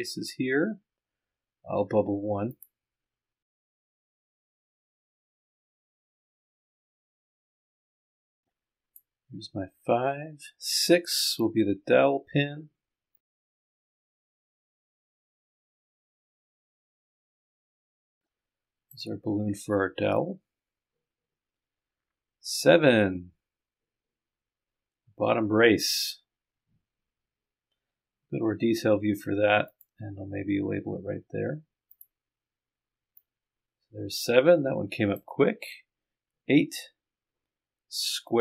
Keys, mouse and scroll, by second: 3.8 click, 4.9 click, 5.1 click, 6.0 click, 6.4 click, 8.2 click, 9.2-10.5 scroll down 1, 11.7-12.4 scroll up 1, 13.4 click, 15.1 click, 29.7 click, 31.9 click, 33.2-35.5 drag, 36.2-36.7 scroll down 2.